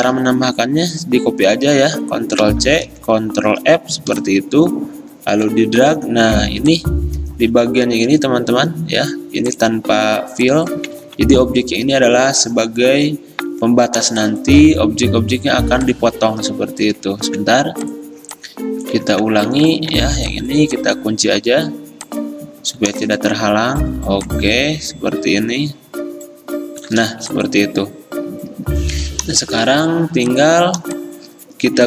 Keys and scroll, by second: 2.5 ctrl+c, 3.0 ctrl+f, 5.8 x, 9.0 x, 11.1 ctrl+z, 17.3 ctrl+z, 19.2 ctrl+z, 20.0 ctrl+2.